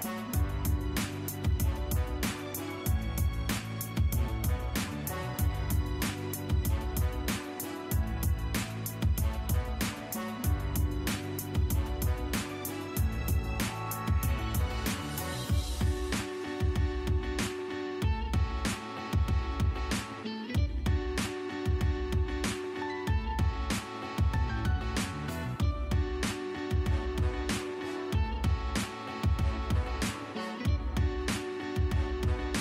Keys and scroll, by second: 3.3 Escape, 5.5 m, 5.6 space, 8.5 e, 8.6 space, 9.7 Escape, 11.7 Escape, 18.2 Escape, 20.2 e, 20.3 space, 24.4 Escape, 32.3 l, 32.4 space.